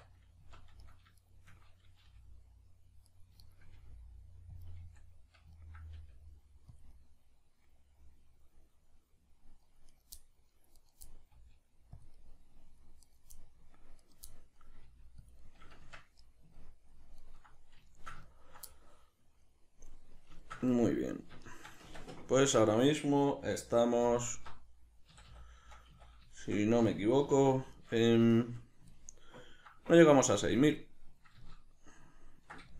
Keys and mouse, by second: 0.8 right click, 1.2 shift+right click, 2.0 g, 3.4 shift+right click, 3.7 g, 4.6 click, 4.8 z, 5.5-6.8 ctrl+middle drag, 5.9 g, 6.8 click, 6.9-9.9 middle drag, 9.9 right click, 10.1-10.7 middle drag, 10.7 right click, 11.0-12.0 middle drag, 11.3 g, 12.0 click, 12.2 middle click, 13.0 right click, 13.4 middle click, 14.0 right click, 14.3-15.3 middle drag, 14.8 g, 15.3 click, 15.4-15.8 middle drag, 15.8 Tab, 16.2-32.7 middle drag, 21.8 Tab, 27.2 3.